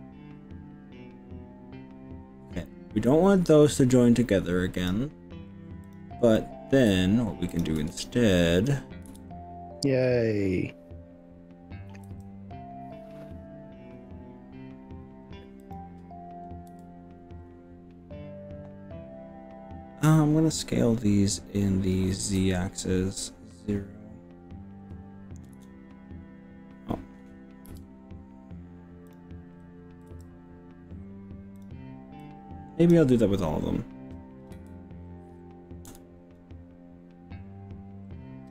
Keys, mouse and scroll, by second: 4.8 click, 5.8 click, 6.4 middle click, 7.6 shift+click, 7.7 shift+click, 7.9 middle click, 9.1 KP_1, 12.2 g, 15.6 click, 16.8 s, 19.3 5, 22.2 z, 25.6 KP_0, 27.8 0, 29.2 click, 30.1 g, 31.6 click, 32.2 click, 34.6 s, 36.0 KP_0.